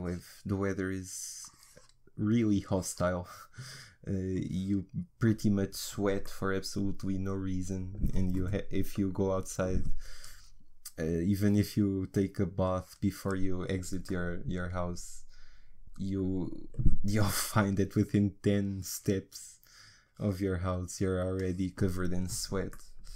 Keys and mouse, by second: 6.3 middle click, 7.4 middle click, 7.7 middle click, 11.2-14.1 drag, 14.1 middle click, 14.7 middle click, 15.0-16.3 middle drag, 18.5-23.1 drag.